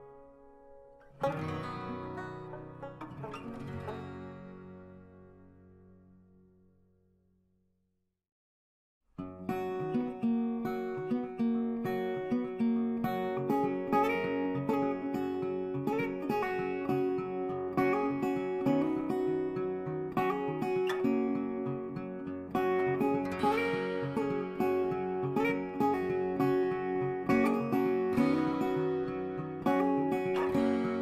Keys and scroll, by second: 14.9 ctrl+i.